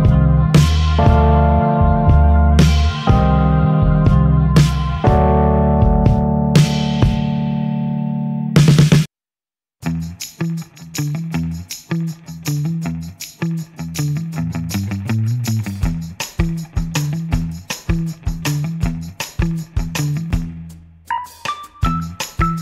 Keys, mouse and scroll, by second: 2.9 click, 4.3 click, 5.6-8.0 drag, 9.1 click, 10.5-12.5 drag, 13.7 click, 18.3 F1, 19.6 click, 20.4 click, 22.5 click.